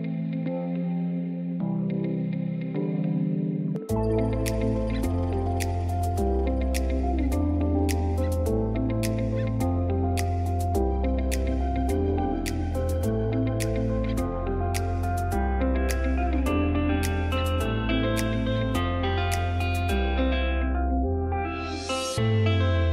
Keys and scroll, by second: 0.0 F2, 5.4 space, 7.6 b, 7.9 Escape, 11.6 F2.